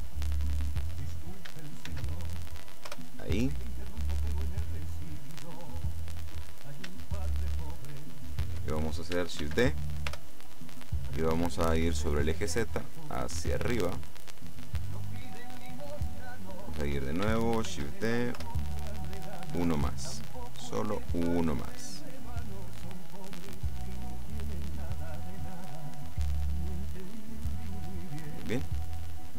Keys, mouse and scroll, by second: 2.0 shift+d, 3.0 Return, 4.2-7.1 drag, 7.1 shift+right click, 7.8 right click, 9.5 shift+d, 11.4-12.8 middle drag, 12.9-16.1 drag, 15.8 middle click, 17.8 shift+d, 18.4 Return, 19.4-21.6 drag, 21.4 middle click, 24.1-24.7 scroll up 1, 25.7 middle click, 26.9 middle click, 27.5 middle click.